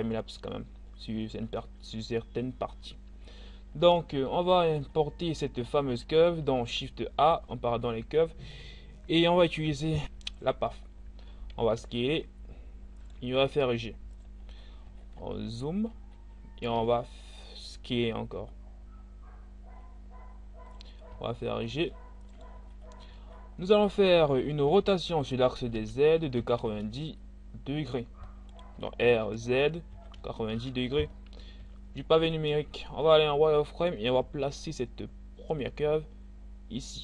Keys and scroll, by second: 11.4 s, 13.3 g, 16.8 s, 20.6 g, 24.7 r, 25.8 z, 26.3 9, 26.6 1, 28.8 r, 29.0 z, 30.0 9, 30.5 e, 31.6 z, 34.4 g.